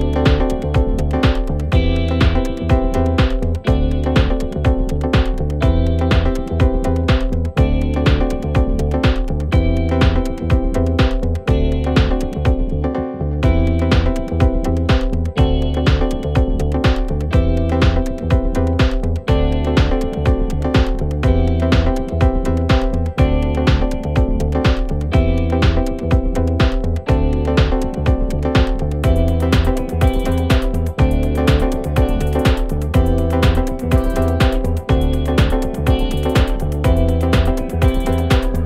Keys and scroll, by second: 7.1 /, 12.2 /, 19.3 F1, 21.9 1, 28.9 shift+r, 29.1 shift+o, 29.2 shift+f, 29.4 Return, 30.6 ctrl+d, 34.0 4, 37.2 F1, 38.6 ctrl+z.